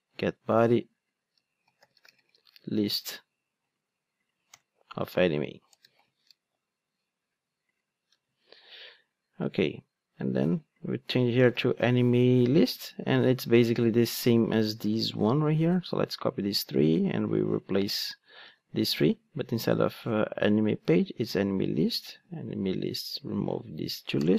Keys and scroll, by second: 15.3 super+c, 18.4 super+v, 20.5 super+c, 21.4 super+v.